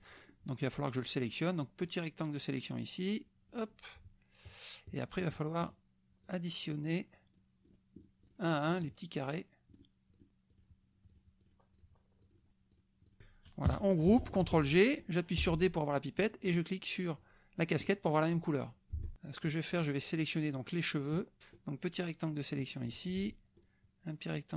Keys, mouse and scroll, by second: 0.2 middle click, 0.6 middle click, 1.8-3.7 drag, 5.1 shift+click, 5.6 shift+click, 6.2 shift+click, 6.9 shift+click, 7.3 shift+click, 7.8-8.5 shift+drag, 8.9 shift+click, 9.3 shift+click, 9.9 shift+click, 10.1-10.7 shift+drag, 11.0 shift+click, 11.2 shift+click, 11.5 shift+click, 12.2 shift+click, 12.5 shift+click, 12.8 shift+click, 13.0 shift+click, 13.6 KP_Subtract, 14.4 ctrl+g, 14.6 ctrl+click, 15.5 d, 16.2 click, 17.9 click, 18.9 F1, 19.1 click, 19.5-21.5 middle drag, 20.6 ctrl+click, 20.6 ctrl+z, 21.5-23.1 drag, 23.6-24.5 shift+drag.